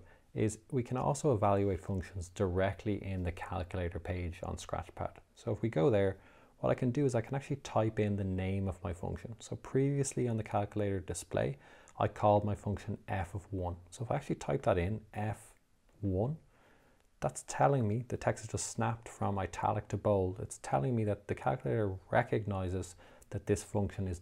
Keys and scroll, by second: 14.9 f, 16.3 1.